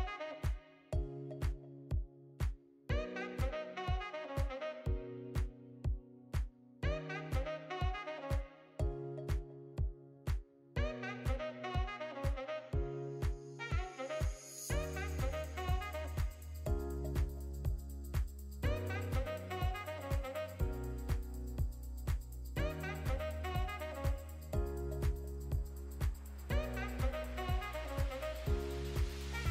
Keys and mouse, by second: 1.1 shift+drag, 1.3 shift+drag, 2.3 ctrl+z, 2.3 middle click, 3.9 middle click, 4.1 shift+middle click, 4.4 shift+click, 4.9 ctrl+l, 6.1 click, 7.6 click, 8.4 click, 8.7 middle drag, 9.5 shift+middle click, 10.0-10.3 middle drag, 13.0 middle click, 13.4 middle click, 14.1 middle click, 14.7 click, 15.3 click, 15.9 ctrl+v, 16.5 click, 23.6 ctrl+l, 24.9-25.9 middle drag, 27.3 shift+middle click.